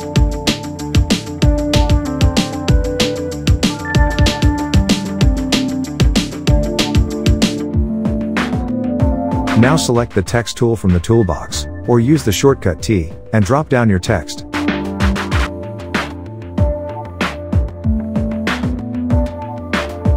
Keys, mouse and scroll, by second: 1.4 Return, 2.4 click, 2.7 shift+click, 3.5 click, 4.6 click, 6.2 Return, 7.0 click, 12.6 click, 18.5 click.